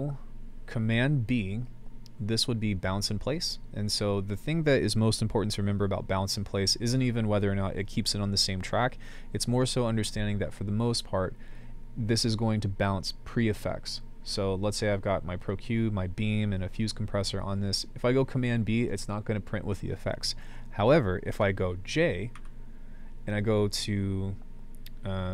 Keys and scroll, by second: 22.4 j.